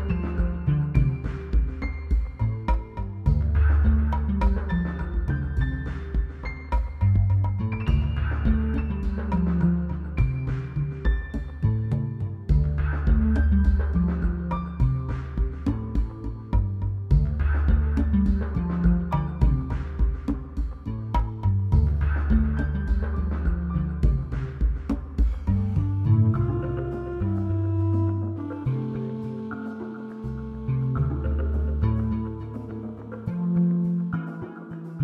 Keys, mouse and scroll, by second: 14.6-19.6 drag, 23.8-27.9 shift+drag.